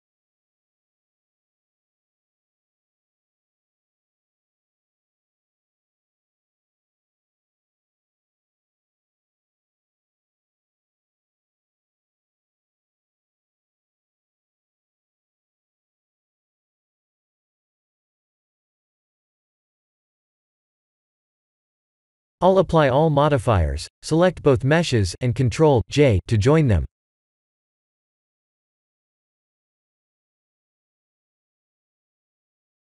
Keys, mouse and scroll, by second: 2.2-2.6 scroll down 3, 2.5 middle click, 3.2 shift+middle click, 3.9 middle click, 5.4 click, 6.0 click, 6.4 click, 16.3 click, 16.6 middle click, 20.8 click, 22.4 click, 26.1 click, 27.9 click, 28.1 ctrl+a, 28.7 click, 29.7 click, 30.0 ctrl+a, 30.5 click, 31.5 shift+click, 32.6 ctrl+j.